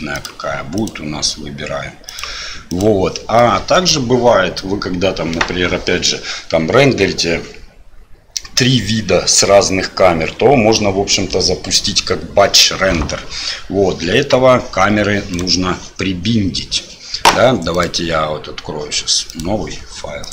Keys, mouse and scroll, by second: 0.1 click, 2.1 click, 3.4-3.7 middle drag, 14.1 KP_1, 15.3 right click, 17.7-20.3 drag.